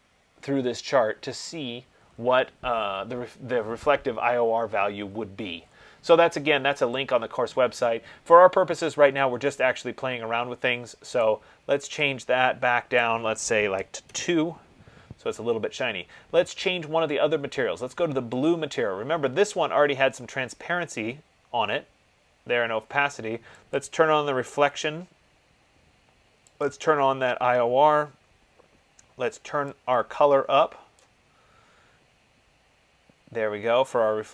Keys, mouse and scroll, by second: 0.4-2.4 scroll, 2.4 middle click, 2.9 middle click, 3.0-3.7 scroll, 3.7-4.0 scroll, 4.7-7.2 scroll, 7.2 click, 7.2-10.8 scroll, 11.4 click, 13.4 click, 13.9-14.2 typing, 18.7 click, 24.0 click, 26.9 click, 31.1 click.